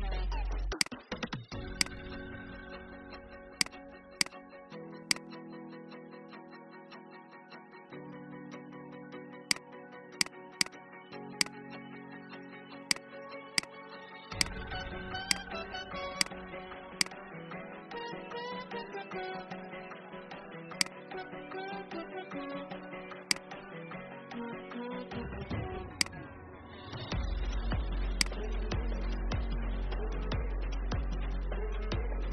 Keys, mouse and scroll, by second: 0.7 click, 5.0 click, 9.4 shift+click, 10.5 right click, 11.3 click, 16.2 shift+click, 16.9 shift+click, 20.7 shift+click, 23.1 shift+click, 25.9 shift+click, 28.0 shift+click, 30.4-32.1 scroll up 2, 32.1-32.3 scroll down 1.